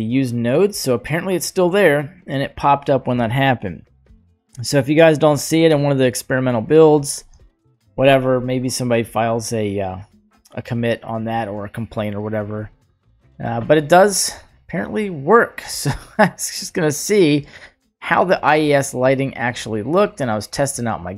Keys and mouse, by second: 1.4 click, 7.6 shift+middle click, 15.6 drag, 16.8 click, 18.4 middle click, 19.8-20.1 middle drag.